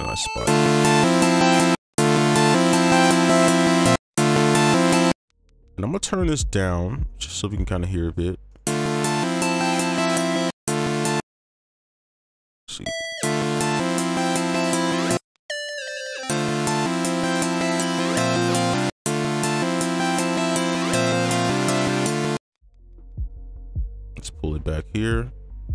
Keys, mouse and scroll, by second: 0.4 space, 1.7 space, 1.9 space, 3.9 space, 4.1 space, 5.1 space, 8.5 right click, 10.4 space, 10.6 space, 10.9 ctrl+click, 11.1 space, 12.4 right click, 15.1 space, 16.2 space, 17.0 space, 17.2 ctrl+click, 19.0 space, 20.5 alt+click, 23.0 right click, 23.4 ctrl+click, 25.1 alt+click.